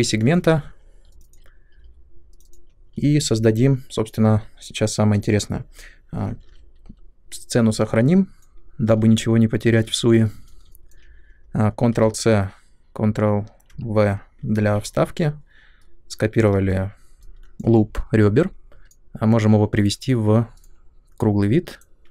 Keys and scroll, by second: 6.4 ctrl+s, 8.3-9.1 typing, 12.0 ctrl+c, 13.6 ctrl+v, 14.5 w, 17.1 space.